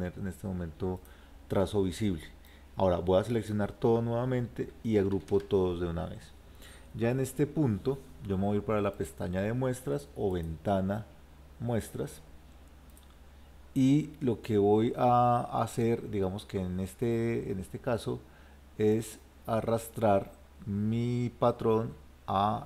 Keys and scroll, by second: 5.2 ctrl+g.